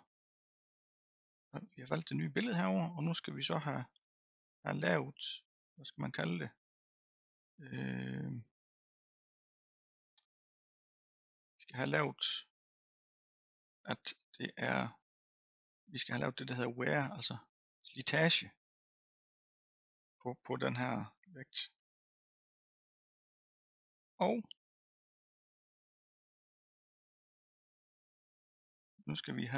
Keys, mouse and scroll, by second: 3.9 click, 4.6 scroll down 2, 5.1-5.8 scroll up 1, 21.1 scroll down 3, 21.8-29.5 middle drag.